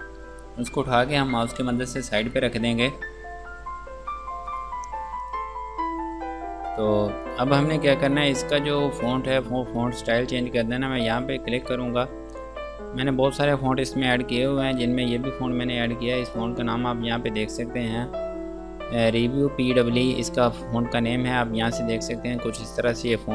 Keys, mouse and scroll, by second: 6.9 click, 11.3 click, 16.6 click.